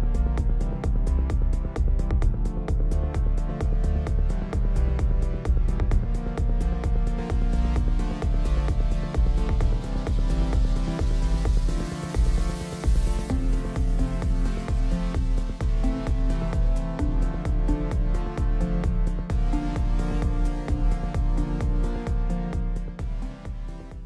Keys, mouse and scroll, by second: 0.0 middle click, 0.2 scroll up 1, 0.2 click, 0.7 middle click, 0.8 scroll down 2, 0.9 middle click, 1.0 scroll up 1, 1.1 shift+middle click, 1.8 shift+click, 1.9 middle click, 2.7 middle click, 2.7 scroll up 1, 2.8 shift+click, 3.4-4.7 typing, 3.5 click, 4.0 click, 4.2 middle click, 4.4 shift+click, 4.8 click, 5.5 click, 5.5 middle click, 6.2 f, 6.2 click, 6.5 shift+middle click, 6.7 scroll down 1, 6.7 shift+middle click, 6.8 scroll up 1, 6.9 click, 7.2 shift+click, 7.4 shift+click, 7.5 scroll down 1, 7.5 middle click, 7.8 scroll up 1, 7.8 middle click, 8.0 f, 8.1 click, 8.3 click, 8.6 shift+click, 9.3 click, 9.6 shift+c, 9.6 click, 10.1 scroll down 1, 10.2 middle click, 10.3 scroll up 1, 10.3 click, 10.5 scroll down 1, 10.5 middle click, 10.8 scroll up 1, 10.9 i, 11.1 click, 11.9 shift+click, 12.1 shift+click, 12.5 click, 13.0 scroll down 1, 13.2 shift+middle click, 13.3 z, 13.5 middle click, 13.6 z, 13.8 scroll down 1, 13.8 middle click, 14.0 middle click, 14.5 scroll up 1, 14.7 click, 15.2-15.9 scroll up 2, 15.2 shift+middle click, 15.9 f, 16.1 click, 16.6 shift+click, 16.7 click, 17.1 click, 17.2 shift+c, 17.2 click, 17.6 i, 17.6 shift+click, 17.9 scroll down 1, 18.0 middle click, 18.6 shift+click, 18.7 middle click, 18.8 scroll up 1, 19.0 shift+click, 19.6 click, 19.7 shift+click, 19.9 middle click, 20.1 shift+c, 20.1 click, 20.5 middle click, 20.8 click, 21.0 middle click, 21.1 scroll down 1, 21.1 shift+middle click, 21.2 scroll up 1, 21.3 middle click, 21.3 f, 21.6 f, 21.6 click, 21.8 ctrl+z, 21.8 i, 21.9 click, 22.1 click, 22.4 click, 22.6 click, 22.8-23.3 drag, 23.4-24.0 drag.